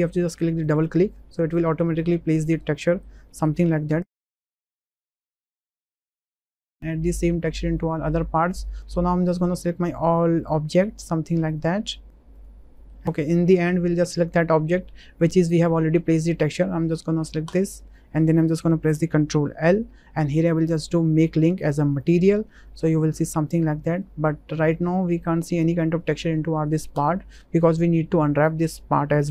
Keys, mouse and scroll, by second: 0.6 click, 1.5 middle click, 2.7 middle click, 3.3 shift+middle click, 3.6-3.9 middle drag, 4.4-5.0 shift+middle drag, 6.7 Tab, 7.7 middle click, 8.7 middle click, 10.0 shift+drag, 10.4 shift+drag, 10.9 shift+drag, 11.6 shift+click, 12.7 middle click, 19.5 ctrl+l, 22.7-23.0 middle drag, 24.0 middle click, 25.0 shift+click.